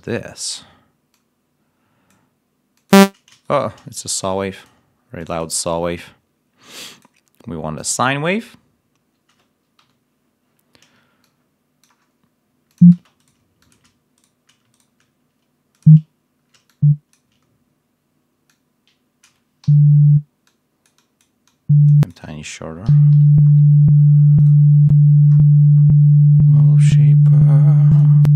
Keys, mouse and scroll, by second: 1.0-2.2 drag, 2.7 click, 3.4 shift+right click, 4.5 click, 9.7 l, 11.3 click, 12.9 space, 19.6 l, 22.8 l, 23.2-23.6 ctrl+scroll down 2, 24.3 right click, 25.2-25.9 scroll down 2, 26.2 scroll down 2, 27.8 click.